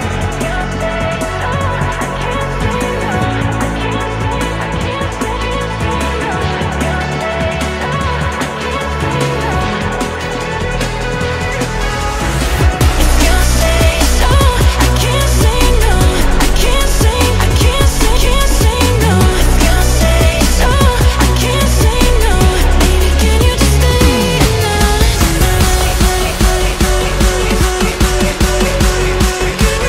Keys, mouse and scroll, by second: 1.5-3.0 drag, 3.2 shift+click, 3.6-5.1 middle drag, 5.1 scroll up 3, 5.6 scroll down 1, 5.9 shift+middle click, 6.3-6.8 scroll up 2, 6.8 ctrl+b, 9.3-10.3 scroll up 1, 10.3 click, 11.2 click, 11.8 shift+click, 12.2 middle click, 13.2 g, 15.4 click, 15.9 g, 17.9-19.0 middle drag, 19.0 KP_7, 19.6 shift+middle click, 20.0-20.7 scroll down 1, 21.5 click, 22.7 click, 24.0 shift+middle click, 24.7 g, 26.1 click, 26.7 g, 29.5 shift+middle click.